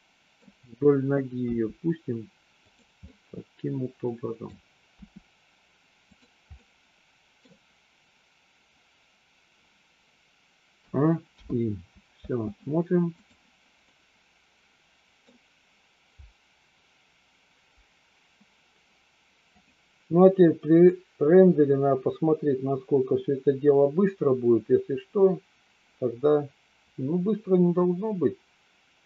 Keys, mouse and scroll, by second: 1.4 g, 3.0-4.4 middle drag, 4.9 r, 6.5 middle click, 11.3 i, 12.2 space, 13.2 click, 13.8-15.3 middle drag, 19.4 click, 20.8-29.0 drag.